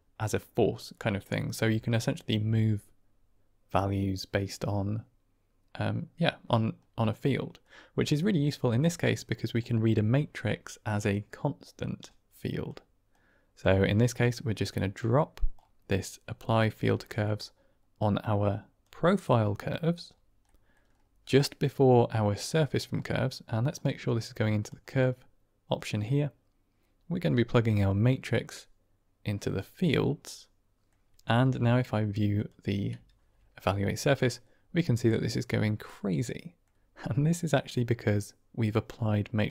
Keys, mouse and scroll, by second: 6.8 middle click, 8.2 middle click, 9.6-12.6 drag, 13.1 click, 14.1 click, 15.0 click, 16.5 middle click, 17.1 middle click, 17.9 click, 20.3 middle click, 22.4 middle click, 23.6-24.6 drag, 25.7 middle click, 27.5-29.5 drag, 30.1 middle click, 32.2 ctrl+shift+click, 33.6-36.5 middle drag, 37.3 middle click, 39.3 click.